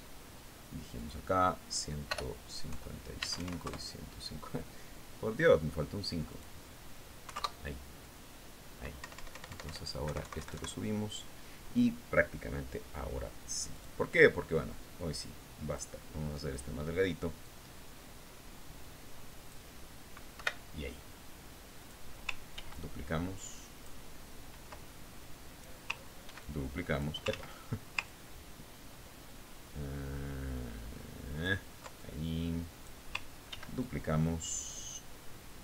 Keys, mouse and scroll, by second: 0.1 ctrl+click, 2.5 click, 3.7 BackSpace, 4.7 Tab, 4.9 KP_5, 5.2 KP_Enter, 7.8 click, 8.8 KP_5, 8.9 KP_Enter, 10.5 Up, 11.5 Right, 15.2 click, 16.5 click, 18.0 click, 18.9-21.3 drag, 21.9 Delete, 23.3 click, 24.1 ctrl+d, 24.2-25.6 ctrl+drag, 26.4 ctrl+click, 27.8 ctrl+d, 27.8 ctrl+click, 28.8 ctrl+z, 29.6-33.0 ctrl+drag, 33.5-34.7 ctrl+drag, 35.0 ctrl+d, 35.3-35.6 ctrl+drag.